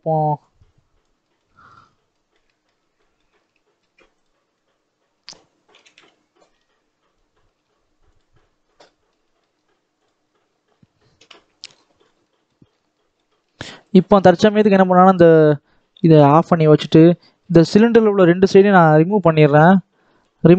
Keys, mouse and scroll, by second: 0.4 click, 1.1 middle click, 1.7 scroll up 3, 2.0 middle click, 2.7 scroll up 2, 2.9-4.1 middle drag, 4.1 click, 4.5 scroll down 1, 4.7-5.6 scroll up 1, 5.6 g, 8.3-8.7 scroll down 1, 8.7 middle click, 9.4-9.9 scroll up 1, 9.9 click, 10.1-11.1 scroll down 4, 11.1 KP_7, 11.6-11.9 scroll up 3, 11.9 scroll down 2, 12.1 middle click, 12.8 middle click, 13.8 click, 14.5 x, 14.7 scroll down 1, 14.9 middle click, 15.3-16.1 scroll down 1, 16.1 click, 16.5 middle click, 16.8 scroll up 2, 17.3 middle click, 17.9 click, 18.6 x, 19.5 KP_7, 20.1 scroll up 3, 20.3-20.5 shift+middle drag.